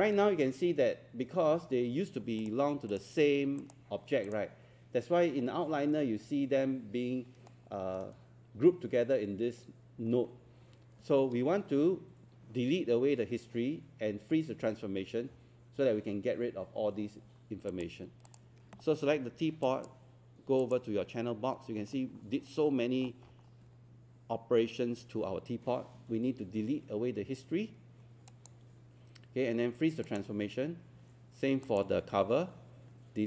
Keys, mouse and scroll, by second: 2.5 click, 22.0 scroll down 1, 23.0 scroll up 1, 28.3-29.4 drag.